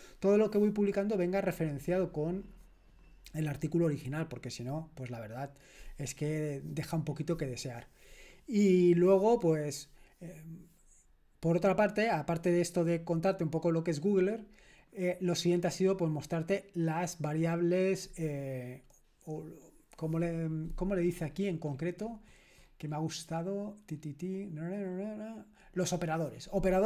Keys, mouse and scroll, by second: 21.3-24.0 scroll up 1, 24.0-24.6 scroll up 1, 24.6-26.8 scroll down 1.